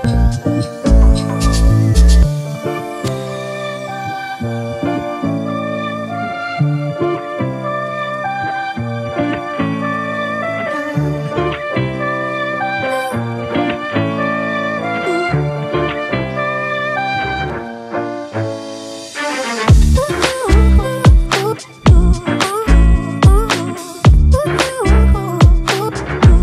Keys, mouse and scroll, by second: 17.5-20.0 scroll down 1, 22.1-23.6 typing.